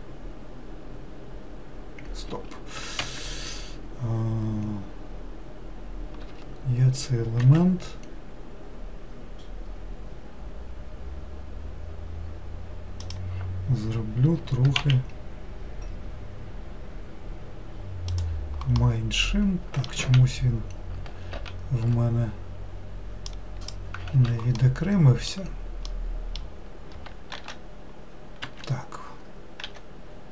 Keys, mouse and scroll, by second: 6.3 s, 14.4 s, 18.8-20.0 middle drag, 20.0 ctrl+z, 21.3 ctrl+z, 23.3 click, 24.1 ctrl+z, 24.6-27.4 middle drag, 27.4 shift+d, 29.6 e.